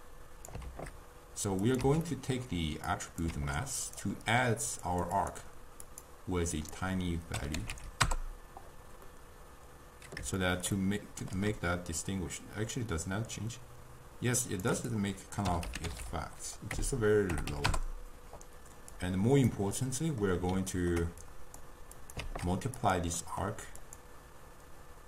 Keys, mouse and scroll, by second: 0.7 shift+d, 1.9 x, 2.1 middle click, 3.0 click, 3.4 shift+d, 4.3-4.9 middle drag, 4.9 click, 5.2-9.1 drag, 9.1-12.1 middle drag, 12.1-16.0 shift+drag, 16.0 0, 19.0-19.9 drag, 19.9-21.4 middle drag, 21.4 click, 22.1 click, 22.3 shift+d, 23.3-23.9 middle drag, 23.9-25.0 drag.